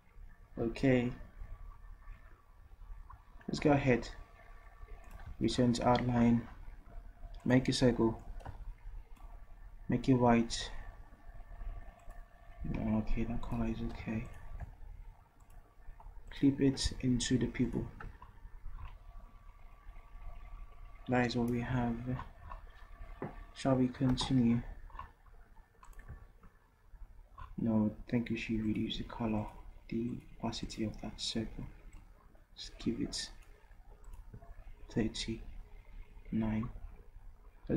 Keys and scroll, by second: 14.0 v.